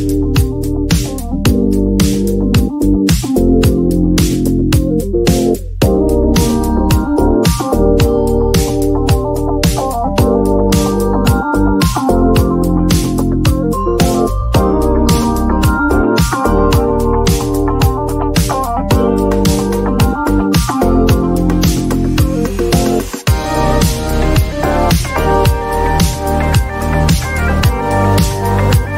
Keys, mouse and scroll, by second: 0.6 click, 0.6 click, 2.3 typing, 3.6-5.3 typing, 5.9 click, 6.0 click, 9.3 Right, 12.1 typing, 13.5-16.3 typing, 17.8 Right, 18.1 Right, 18.9 /, 20.4 4, 22.0 click, 24.3 click.